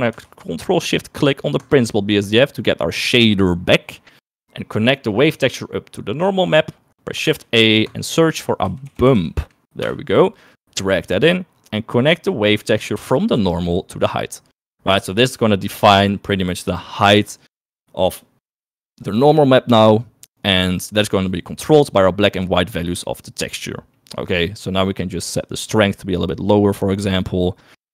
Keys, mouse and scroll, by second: 1.8 ctrl+shift+click, 5.4-6.5 drag, 7.3 shift+a, 13.4 click, 21.1 middle click, 24.1 middle click, 25.7-27.9 drag.